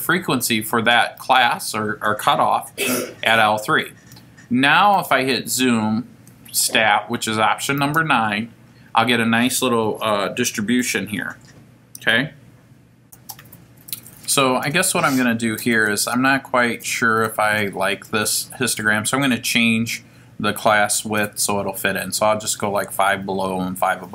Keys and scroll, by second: 7.8 9, 13.0 0, 15.6 Left, 19.1 5, 21.4 Down, 23.4 1, 24.0 0.